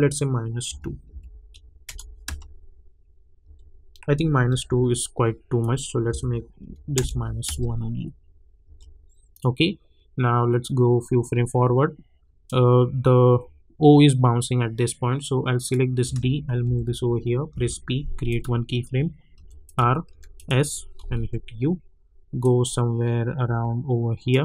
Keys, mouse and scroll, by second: 1.0 -, 1.8 Return, 2.2 space, 4.1 j, 4.5 j, 5.6 click, 6.1 -, 6.9 Return, 7.4 space, 9.4-14.9 drag, 15.5 click, 16.6 [, 17.5 p, 18.3 click, 19.3 r, 19.6 click, 20.1 s, 20.3 click, 21.2 u, 22.4-24.4 drag.